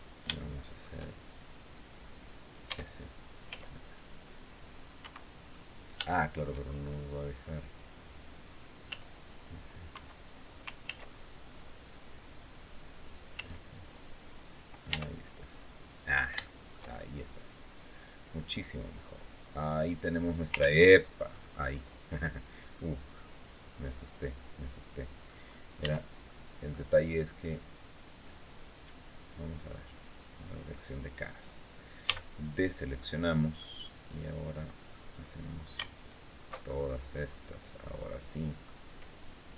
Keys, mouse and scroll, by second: 0.1 shift+middle click, 2.4 s, 3.2 z, 4.7 Escape, 5.8 shift+middle click, 8.6 s, 9.6 Escape, 10.6 ctrl+z, 13.1 s, 14.3 click, 14.6 Tab, 15.2 scroll down 2, 15.8 scroll down 2, 16.1 shift+click, 16.2 shift+middle click, 16.7 shift+click, 16.8-20.1 shift+middle drag, 20.3 ctrl+z, 21.0-21.4 scroll up 2, 21.5-22.6 drag, 22.9-25.2 drag, 25.6 Tab, 26.0 click, 29.8 click, 31.8 a, 33.3-34.8 drag, 34.9-35.3 scroll up 2, 35.7 alt+shift+right click, 36.4 alt+shift+scroll down 2, 36.7-38.5 drag.